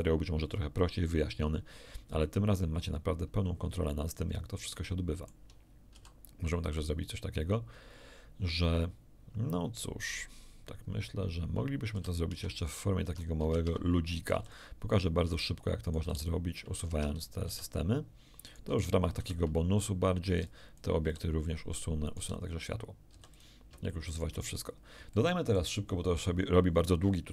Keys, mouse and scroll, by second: 4.2 scroll up 2, 4.7 shift+middle click, 5.9 shift+a, 6.7 shift+click, 9.7 scroll down 2, 11.9 a, 12.2 Tab, 13.0 Tab, 14.3 x, 14.4 ctrl+click, 14.9 ctrl+right click, 15.3 ctrl+click, 15.3 x, 15.8 ctrl+right click, 16.0 x, 16.0 ctrl+click, 16.8 Tab, 17.4 x, 17.5 ctrl+click, 18.4 click, 18.7 x, 19.2 c, 20.2 b, 20.4 click, 21.0 x, 21.0 click, 22.0 click, 22.1 x, 22.2 right click, 23.3 click, 23.8 shift+middle click, 24.4-25.0 shift+scroll up 1, 25.1 shift+middle click.